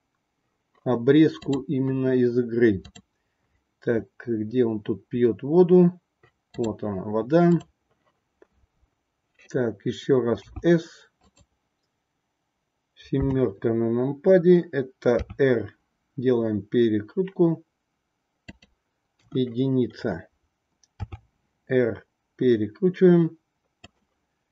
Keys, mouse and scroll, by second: 10.5 s, 13.1 KP_7, 15.1 r, 19.2 KP_1, 21.0 r.